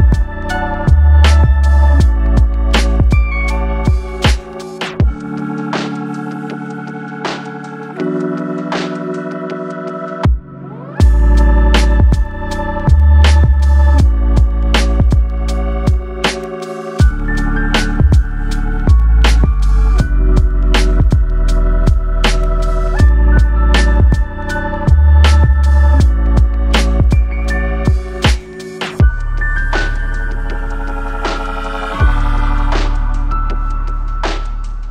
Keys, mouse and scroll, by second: 1.2 Tab, 2.2-2.9 scroll down 1, 2.9 middle click, 5.0-5.4 scroll up 3, 5.5 middle click, 6.4 Tab, 7.5 ctrl+r, 14.0 Tab, 14.5-15.1 scroll down 5, 15.1 middle click, 17.8-18.3 scroll up 3, 18.5-18.8 scroll down 1, 18.8 middle click, 20.5 click, 21.4 middle click, 24.2 middle click, 31.4 click, 33.1 middle click.